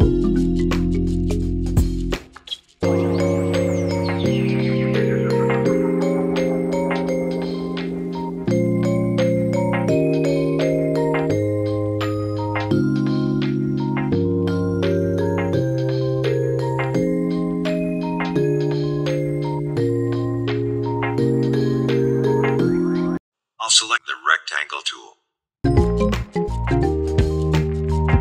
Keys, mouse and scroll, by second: 5.2-6.6 drag, 6.7 click, 10.8 Down, 13.2 Down, 13.5 ctrl+shift+[, 14.7 click, 16.5 click, 18.5 space, 18.6 click, 18.8 space, 19.2 click, 22.1 click, 22.3 right click, 22.8-25.7 drag, 27.0 click, 28.0 Right.